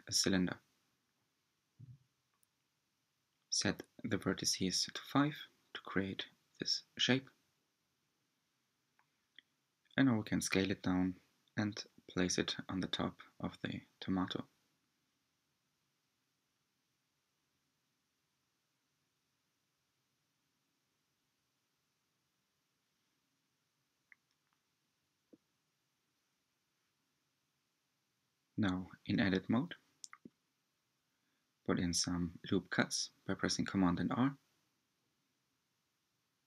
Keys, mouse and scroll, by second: 1.3 click, 4.7 drag, 5.8-6.3 drag, 7.1 click, 8.9 s, 12.8 g, 17.4 s, 19.4 g, 22.1-22.6 scroll up 4, 22.8-23.9 shift+middle drag, 23.9-24.6 scroll up 2, 24.6-26.9 shift+middle drag, 26.9 Tab, 28.0 r.